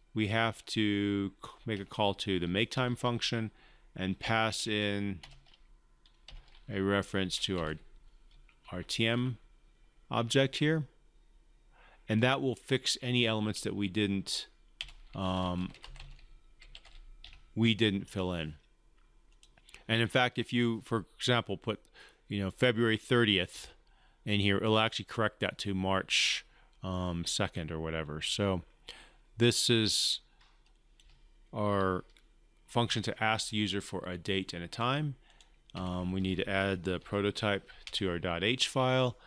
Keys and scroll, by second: 32.7 ctrl+c, 35.7 ctrl+v.